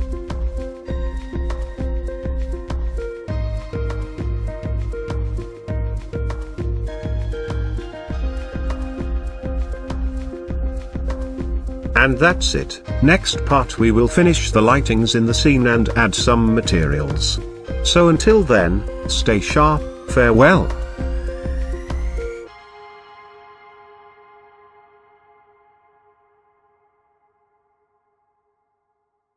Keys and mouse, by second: 1.9 click, 2.8 g, 3.2 x, 4.3 click.